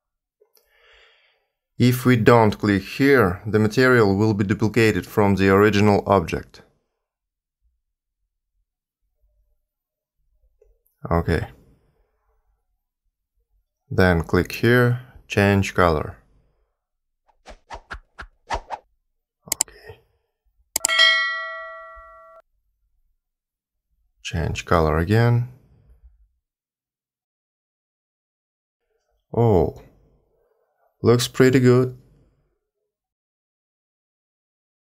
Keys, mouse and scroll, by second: 1.1 click, 4.2 click, 13.3 click, 14.7 click, 20.8 click, 22.1 click, 23.3 click, 27.0-27.5 scroll down 1, 27.5 middle click.